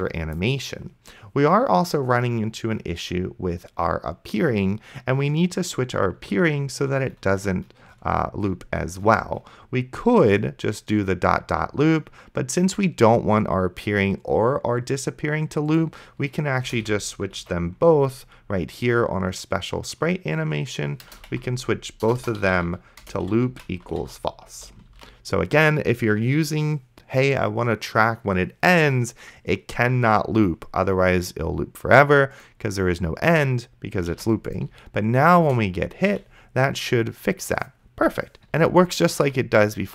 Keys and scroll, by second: 16.8 f, 17.6 ctrl+z, 20.9-25.1 typing, 25.2 ctrl+s, 33.3 d, 34.4 ctrl+z, 34.7 d, 35.7 space.